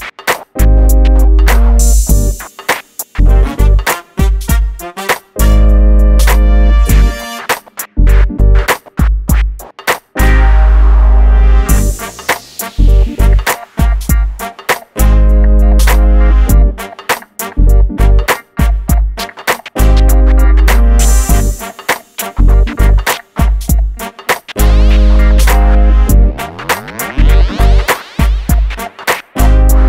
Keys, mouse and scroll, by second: 3.2 space, 3.3 middle click, 3.6 click, 4.2 F3, 6.1 F2, 7.7-8.8 scroll up 1, 8.8 click, 14.0 m, 14.9 click, 17.1 shift+click, 17.6 scroll down 1, 18.1 scroll up 1, 18.7 scroll up 1, 18.7 click, 19.3 scroll down 1, 19.9 click, 21.5 shift+middle click, 21.8-22.2 scroll up 1, 22.2 middle click, 22.9-23.4 scroll down 1, 23.4 shift+middle click, 26.4 m, 26.5 click, 28.8-29.2 scroll up 1.